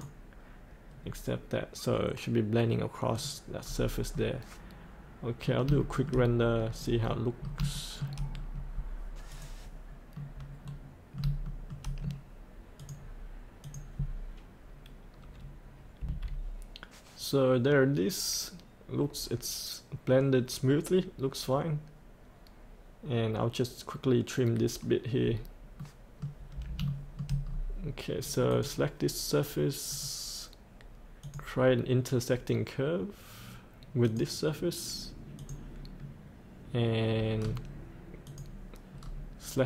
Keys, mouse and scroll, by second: 0.9-3.1 scroll up 1, 3.1 click, 3.6-4.2 scroll up 2, 4.2 middle click, 5.7 shift+middle click, 6.4 scroll down 1, 6.7 scroll up 1, 7.0 middle click, 7.7 shift+middle click, 8.3-9.3 scroll down 1, 9.3 click, 10.1 middle click, 11.4 shift+middle click, 12.7 click, 16.0 F8, 25.7 middle click, 26.8 shift+middle click, 27.4 scroll down 1, 28.5-30.9 drag, 37.3-38.2 scroll down 1, 38.2 click, 39.0 scroll up 1.